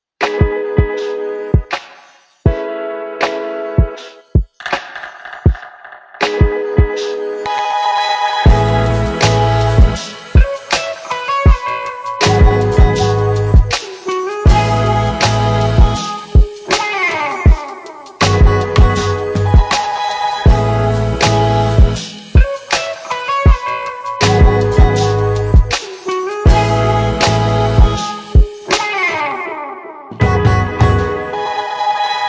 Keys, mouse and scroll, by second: 5.5 shift+click, 6.8 ctrl+shift+c, 8.0-9.9 typing, 11.7 4, 12.8 Return, 15.8 click, 17.8 click, 19.0-20.7 drag, 23.0 shift+click, 28.2 shift+Down, 29.8 click, 30.3 shift+click, 30.7 shift+Up.